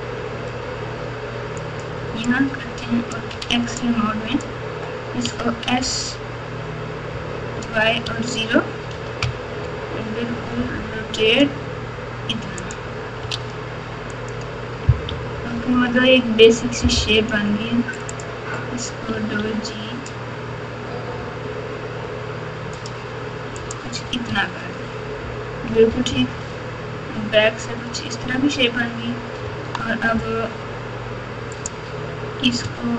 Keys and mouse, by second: 2.3 click, 3.4 alt+z, 4.0 click, 5.2 s, 10.6 r, 13.3 alt+z, 14.1 click, 15.1 KP_6, 15.3 KP_6, 15.5 KP_6, 15.7 KP_6, 18.1 click, 19.1 g, 24.2 Tab, 25.6 KP_6, 25.8 KP_6, 27.7 KP_4, 28.2 KP_4, 28.2 KP_4, 28.5 KP_4, 29.4 Tab, 31.5 click.